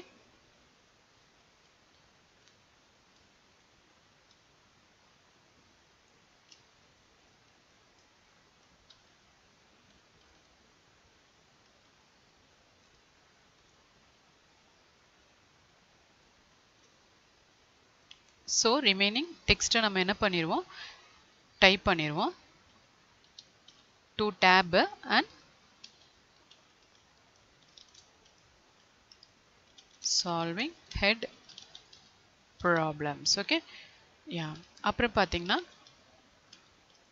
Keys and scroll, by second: 3.1 ctrl+c, 3.3 ctrl+v, 22.6 Tab, 30.0 space, 30.8 space, 33.4 Tab.